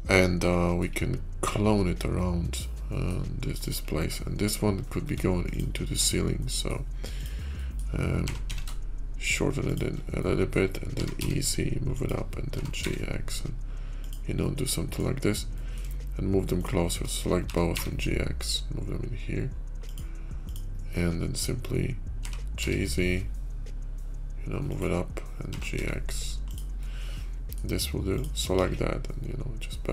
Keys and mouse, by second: 0.3-0.7 middle drag, 1.3 /, 2.1-2.9 drag, 3.4 click, 3.9 Tab, 5.0 Tab, 5.3 click, 5.9 Tab, 6.3 click, 7.4 click, 8.0 g, 10.1 middle click, 10.8 e, 12.4 g, 14.2 middle click, 15.4 middle click, 17.2 g, 22.0 g, 25.3 g, 26.7 click, 28.4 ctrl+b.